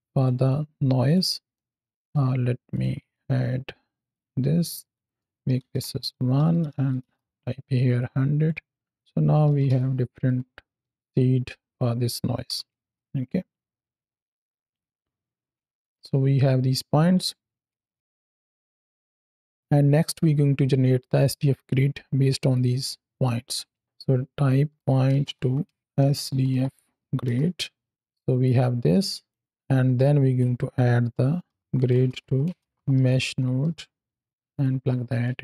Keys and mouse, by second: 0.0-1.0 drag, 1.4 middle click, 1.9 shift+d, 2.6 click, 3.0-4.1 drag, 4.8-6.9 drag, 6.6 KP_0, 7.8-8.3 drag, 8.9 click, 10.1 click, 12.3 KP_7, 12.7 space, 15.3 space, 15.7 drag, 16.2-17.1 middle drag, 17.8 ctrl+space, 18.2-19.5 drag, 22.4-23.1 drag, 28.3 click, 29.4-30.3 drag, 34.4 alt+shift+click, 35.3 ctrl+space.